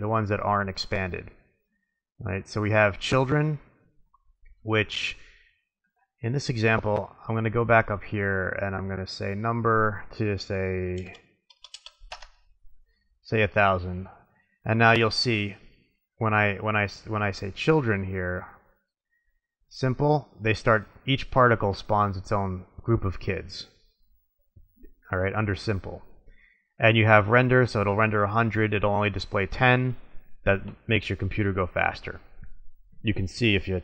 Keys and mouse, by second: 2.7 click, 3.3-5.1 middle drag, 5.5-6.7 middle drag, 9.4-11.0 drag, 11.6 KP_0, 14.1-15.0 drag, 15.0-16.2 middle drag, 17.7-19.1 middle drag, 19.7 middle click, 21.8-24.3 middle drag, 33.1 click.